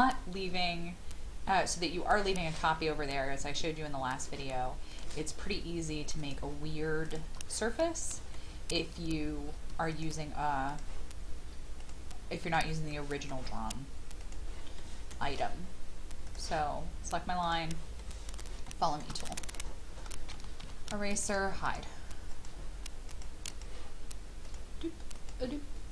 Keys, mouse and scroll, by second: 7.0 shift+click, 7.4-8.1 scroll down 1, 8.3 shift+middle click, 9.9 shift+click, 10.7 shift+click, 11.8 shift+click, 12.4 shift+click, 12.9 shift+middle click, 14.2 shift+click, 14.8 shift+middle click, 16.3 click, 18.0-19.6 middle drag, 19.6-20.0 scroll up 1, 20.6 typing, 21.2 shift+click, 21.6 shift+click, 22.3 shift+click, 23.1 shift+click, 23.5 shift+click, 24.4 shift+click, 25.2 shift+click.